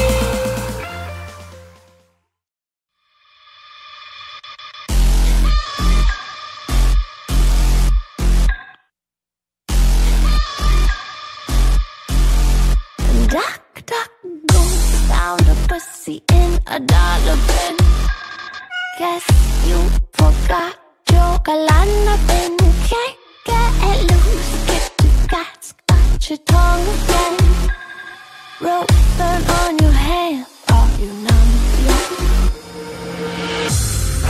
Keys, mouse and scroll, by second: 0.0 n, 0.2-0.6 scroll down 1, 0.7 n, 1.0-1.9 scroll up 11, 1.5 middle click, 1.9 click, 2.2 ctrl+t, 3.0 shift+middle click, 3.4 click, 3.9 shift+middle click, 4.1 shift+scroll down 5, 5.0 click, 6.0 click, 6.6 click, 7.0 click, 8.8 scroll up 1, 8.8 middle click, 9.5-10.3 scroll up 6, 9.6 middle click, 10.5-11.5 scroll down 3, 10.5 middle click, 11.5 scroll down 3, 11.6 middle click, 11.8 shift+middle click, 11.9 click, 12.1 middle click, 12.2 s, 12.9 s, 13.2 click, 13.4 scroll up 5, 13.4 middle click, 13.6 click, 13.7 s, 14.2 shift+middle click, 14.3 click, 14.4 scroll up 6, 14.5 middle click, 14.7 scroll down 4, 14.8 middle click, 14.9 middle click, 14.9-15.2 scroll up 3, 15.1 middle click, 15.3 scroll down 7, 15.4 middle click, 15.8 click, 16.4 s, 17.1 click, 17.4 click.